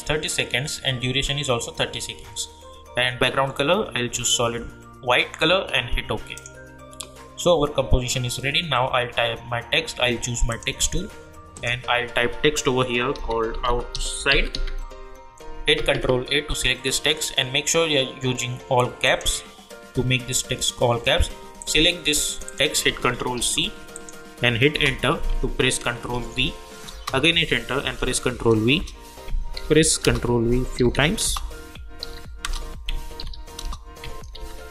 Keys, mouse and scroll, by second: 6.3 click, 10.5 click, 12.9-15.0 typing, 15.7 ctrl+a, 19.0 click, 21.6 click, 22.3 click, 23.3 ctrl+c, 23.9 click, 24.7 Return, 26.1 ctrl+v, 26.9 Return, 27.9 ctrl+v, 28.7 Return, 29.5 ctrl+v, 30.0 Return, 30.7 ctrl+v, 31.2 Return, 32.0 ctrl+v, 32.5 Return, 33.2 ctrl+v, 33.6 Return, 34.3 ctrl+v.